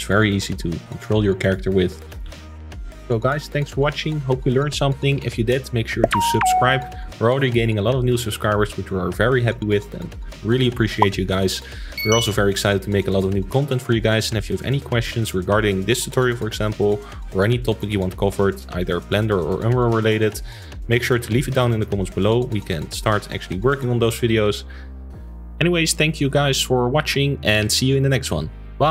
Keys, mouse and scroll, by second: 0.9-2.2 drag, 2.3 ctrl+s, 2.4-3.7 shift+middle drag.